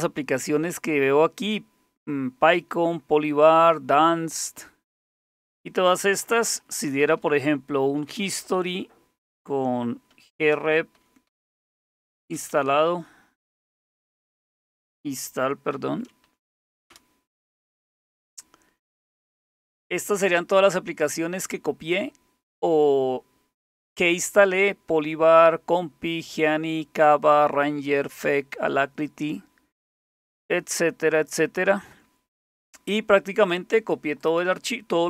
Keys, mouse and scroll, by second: 6.7-15.8 typing, 15.2 Right, 16.3 Delete, 16.4 Delete, 16.6 Delete, 16.9 Return, 34.2 click.